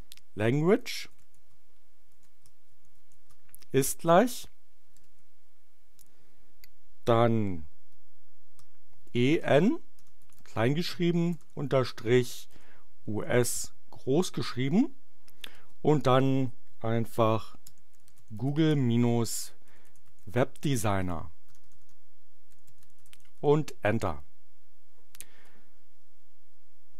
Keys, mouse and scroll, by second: 0.0-3.4 typing, 4.9 shift+o, 9.1-11.3 typing, 12.5 shift+u, 13.0 shift+s, 15.5 space, 17.3-23.4 typing.